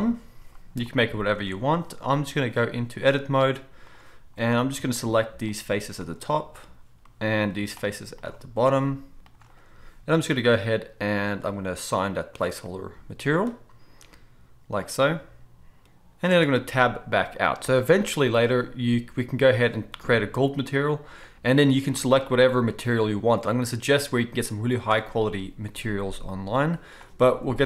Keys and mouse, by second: 1.2-2.2 middle drag, 1.4 Tab, 4.4 middle click, 5.6-7.0 shift+right drag, 7.0-8.2 drag, 8.2 shift+middle click, 8.3-9.3 shift+drag, 9.3 shift+middle click, 9.4-11.3 drag, 11.3 middle click, 11.4-12.0 drag, 12.0-19.8 middle drag, 13.0-17.2 drag, 13.0-17.2 right drag, 16.3 Tab, 19.8-21.2 right drag, 21.2 middle click, 21.4-27.6 right drag.